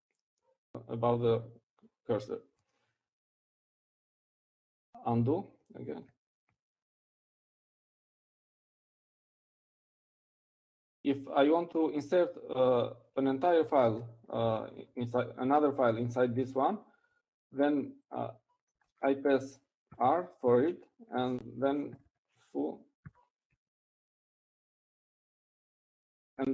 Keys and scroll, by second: 10.0 ctrl+alt+u, 18.5 Down, 18.5 Up, 21.8-26.5 typing.